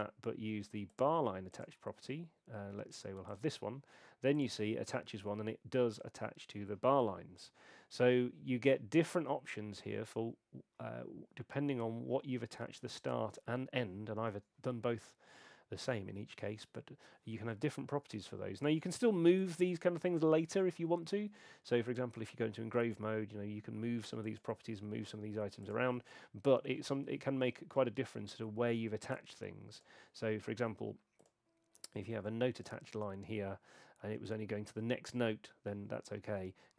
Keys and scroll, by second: 25.9 super+2.